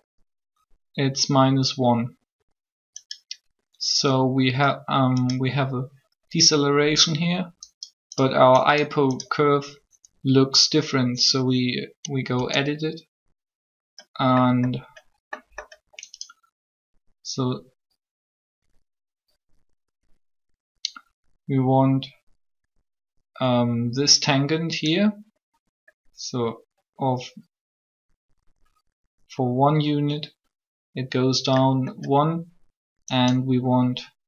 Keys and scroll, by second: 12.2 Tab.